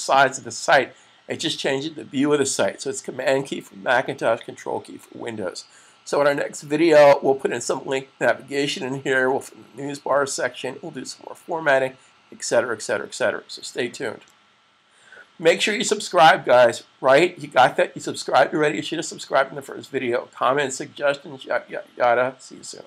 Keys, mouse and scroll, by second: 0.1 typing, 0.4 super+s, 3.2 typing.